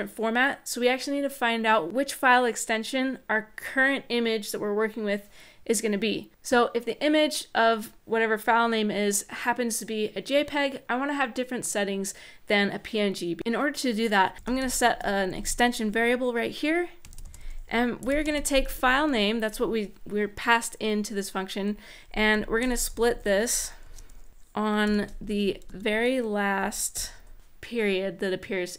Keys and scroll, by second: 14.3-15.6 typing, 16.8-18.6 typing, 21.8-24.6 typing, 25.0 Right, 25.4 Right, 26.3-27.2 typing.